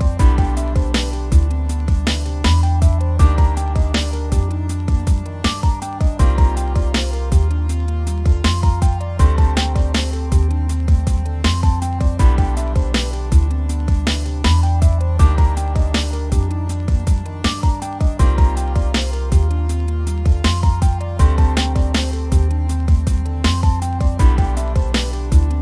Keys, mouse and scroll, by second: 0.2 scroll down 1, 0.5 click, 0.6-0.9 middle drag, 0.9 scroll up 2, 1.1 middle click, 1.9-3.4 scroll down 1, 3.4-3.9 middle drag, 3.9-4.6 scroll up 1, 4.6-6.7 scroll up 1, 6.7-7.6 middle drag, 7.6-9.6 scroll down 1, 9.6-14.6 scroll down 1, 14.6-19.6 scroll down 1, 19.6-24.6 scroll down 1, 24.6-25.5 scroll down 1, 25.5 click.